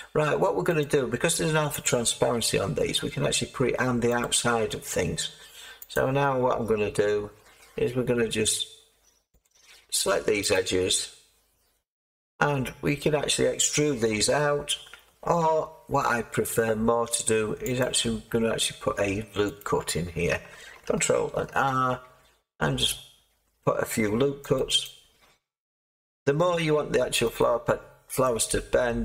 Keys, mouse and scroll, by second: 2.3 g, 4.2 click, 5.9 click, 21.2 ctrl+r, 22.0 scroll up 1, 22.1-24.5 middle drag, 22.1-22.7 scroll, 22.7-23.4 scroll, 23.5-24.1 scroll, 24.1-24.5 scroll, 24.5-29.0 drag.